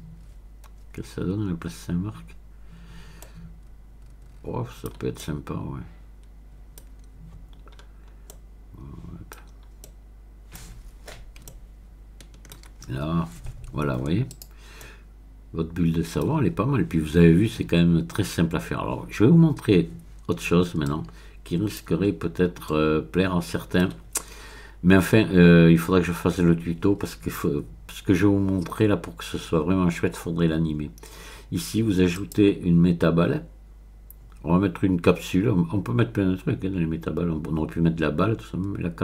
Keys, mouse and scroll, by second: 3.2-6.9 middle drag, 6.9-7.7 scroll down 2, 7.7-8.3 scroll up 2, 9.5 middle click, 10.8 middle click, 12.7-14.4 shift+middle drag, 14.3 click, 14.8-16.6 middle drag, 17.2-18.4 scroll down 1, 18.4 scroll down 1, 19.3-20.2 scroll down 1, 20.8-22.1 drag, 22.1-22.7 scroll down 1, 22.7-25.0 middle drag, 32.1 click.